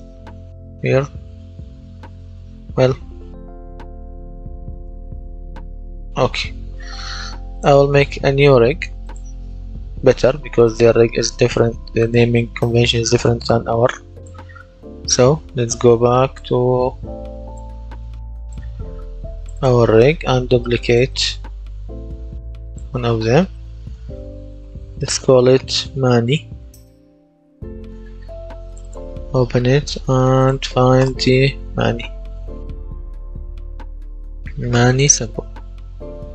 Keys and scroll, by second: 0.0-1.0 typing, 2.8 BackSpace, 5.5 BackSpace, 23.8 Right, 24.3 BackSpace, 26.4 y, 27.5 Return, 31.2-32.9 typing.